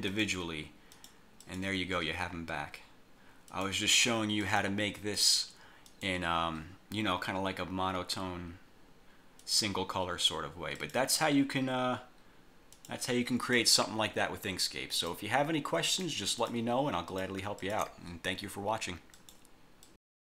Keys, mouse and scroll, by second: 0.2 click, 1.0 click, 1.5 click, 3.6 click, 4.5 click, 5.3 click, 5.9 click, 9.5 click, 10.9 click, 12.9 click, 13.5 click, 14.7 click, 16.0 click, 16.5 shift+click, 17.2 shift+click, 17.7 shift+click, 19.3 click, 20.0 click.